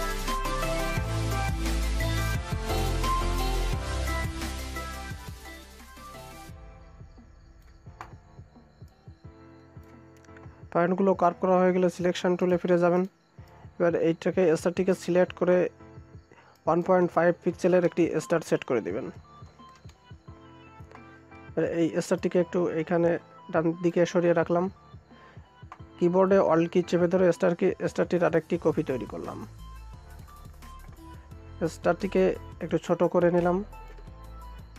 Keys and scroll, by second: 19.6 Return.